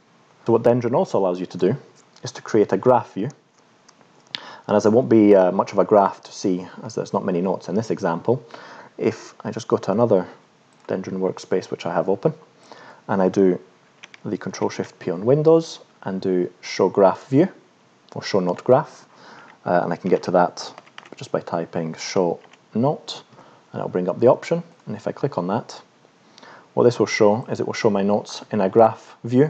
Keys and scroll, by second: 25.9-26.9 scroll down 4, 27.9-28.3 scroll down 2, 28.5-29.0 scroll up 2.